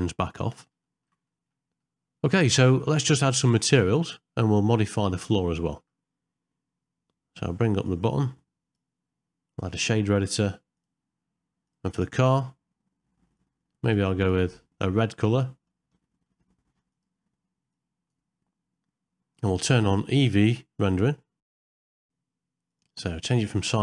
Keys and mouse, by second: 0.9 ctrl+middle click, 1.3 shift+middle click, 1.9 middle click, 5.6 ctrl+middle click, 7.8-9.0 drag, 9.9 click, 11.7 click, 13.4 click, 14.2 click, 16.1 middle click, 16.9 click, 21.4 click, 21.5 middle click, 21.9 click, 22.7-23.8 drag.